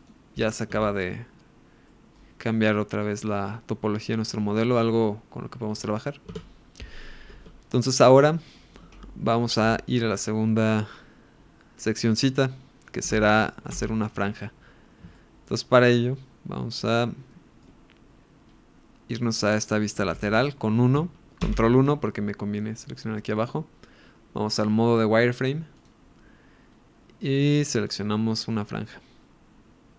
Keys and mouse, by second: 0.0 ctrl+r, 1.0 Tab, 1.8 middle click, 6.3 Tab, 7.6 Tab, 7.9 middle click, 8.7 KP_1, 11.5 middle click, 13.0 KP_1, 13.6 KP_1, 15.1 shift+middle click, 15.7-17.6 shift+drag, 20.1 KP_1, 21.4 ctrl+KP_1, 25.7 click, 27.8-29.9 drag.